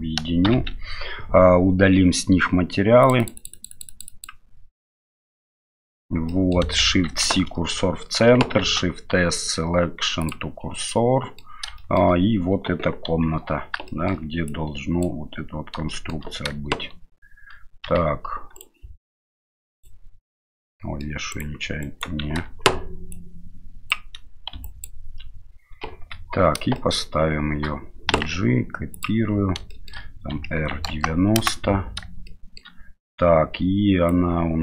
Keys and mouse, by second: 0.4 ctrl+j, 3.2 click, 3.3 click, 3.7 click, 4.1 click, 5.4 middle click, 6.3 middle click, 7.0 shift+c, 8.6 shift+s, 10.9-11.4 middle drag, 11.8 shift+middle drag, 13.1 KP_7, 13.9 shift+middle drag, 14.5-15.2 drag, 15.9 shift+middle drag, 17.8 g, 19.3-19.8 drag, 20.6-21.0 middle drag, 21.3 right click, 21.8 right click, 22.4 ctrl+z, 23.1-24.0 drag, 24.6 ctrl+drag, 25.9 KP_7, 26.0 KP_7, 26.8 shift+middle click, 28.1 g, 29.7 shift+middle click, 30.3 r, 32.3-32.6 shift+middle drag, 34.1 click.